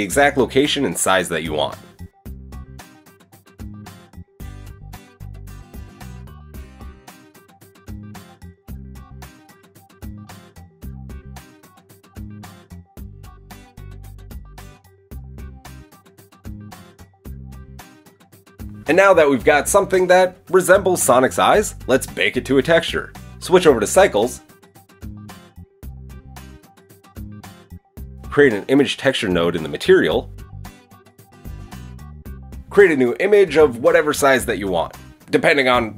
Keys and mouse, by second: 0.8-2.6 shift+middle drag, 2.6-3.8 shift+drag, 4.8-8.1 drag, 8.1 middle click, 8.3-10.6 drag, 10.6 middle click, 10.8-13.8 drag, 17.6-19.4 drag, 28.6 shift+a, 31.7 middle click, 32.6-35.9 drag.